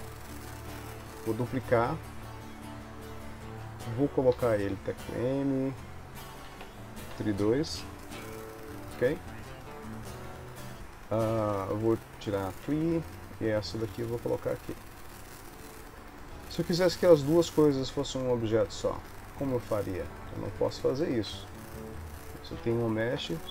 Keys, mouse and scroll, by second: 4.5 m, 6.9 e, 12.4 click, 13.9 g, 16.4 r, 19.1 ctrl+s, 19.6 click, 20.6 shift+click, 21.5 click, 22.1 shift+click, 23.3 ctrl+j.